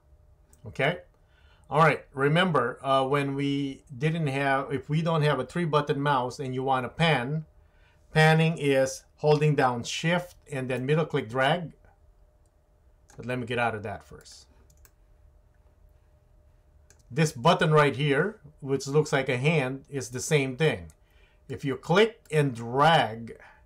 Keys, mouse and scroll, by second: 10.8-13.1 shift+middle drag, 14.2 click, 14.8-16.9 shift+middle drag, 20.3-21.5 drag, 22.3-23.6 drag.